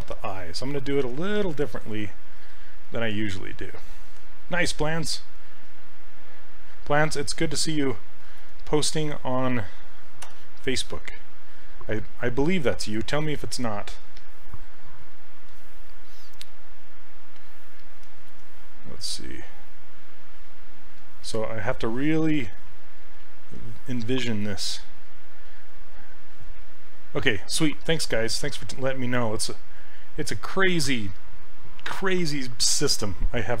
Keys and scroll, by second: 10.3 e, 15.1 2, 15.4 2.